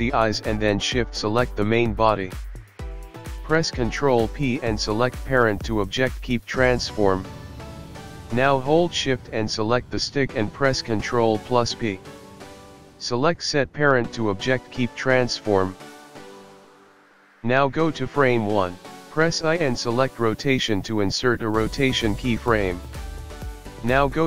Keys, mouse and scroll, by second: 0.8 click, 2.4 shift+click, 3.0 right click, 5.2 ctrl+p, 12.8 shift+click, 14.3 ctrl+p, 17.3 scroll down 2, 17.3 KP_1, 17.8 shift+Left, 17.8 click, 20.6 i.